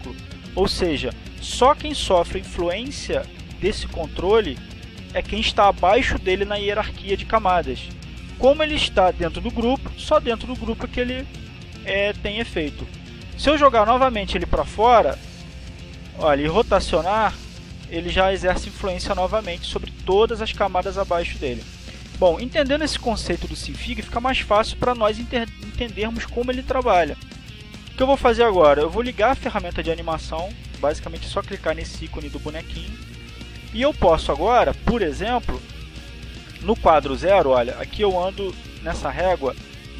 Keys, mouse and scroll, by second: 2.9 click, 3.8 click, 12.1 click, 15.9 click, 16.6 click, 17.3-18.3 drag, 18.9 click, 20.3 click, 22.0 ctrl+z, 32.2 click, 38.9 click.